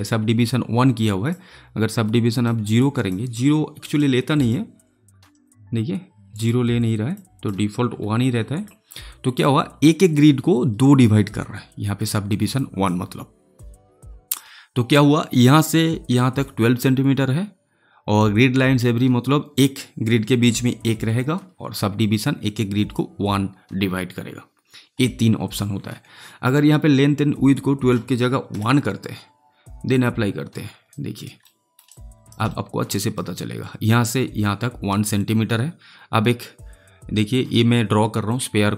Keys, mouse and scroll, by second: 0.7 click, 7.4 click, 12.5 click, 27.5-29.9 drag, 30.8 alt+right click, 31.4 alt+middle click, 31.8 alt+right click, 32.4 alt+middle click, 32.9 alt+right click, 38.2 click.